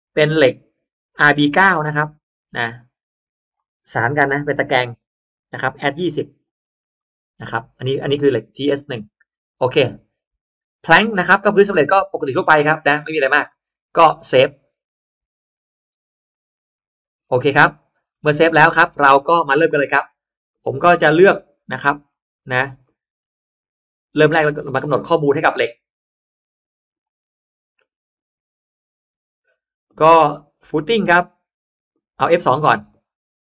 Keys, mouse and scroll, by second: 2.2-3.4 drag, 4.2 Delete, 4.6 click, 6.8 click, 11.2 click, 14.0-14.6 scroll up 1, 16.2 click, 17.1-17.9 scroll down 2, 17.4 middle click, 17.9-18.6 scroll up 1, 18.5 middle click, 18.8 scroll down 1, 19.0-19.4 scroll up 1, 19.4 middle click, 20.4-21.9 middle drag, 22.3 scroll up 1, 22.7 middle click, 26.9 click, 29.8 click, 30.7 click, 31.8 click, 32.8 click, 33.4 click.